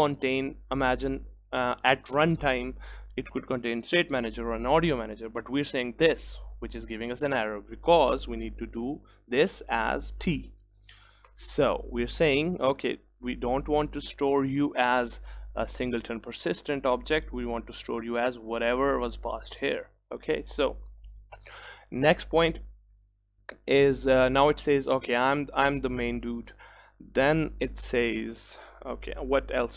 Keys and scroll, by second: 12.6 ctrl+s.